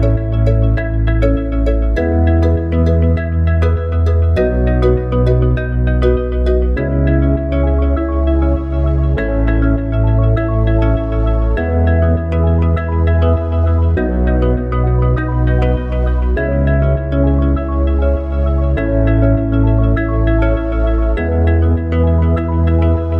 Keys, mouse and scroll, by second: 0.3 KP_1, 1.2 KP_3, 3.8 click, 6.1 KP_7, 8.4 s, 12.3 click, 14.8 s, 17.3 click, 22.7-23.1 middle drag.